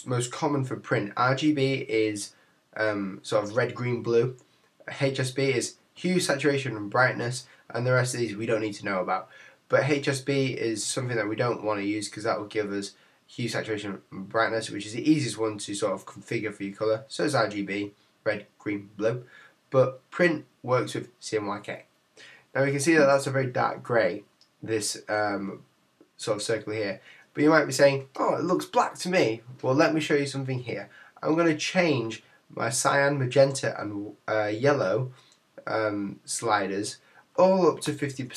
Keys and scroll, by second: 38.1 Tab.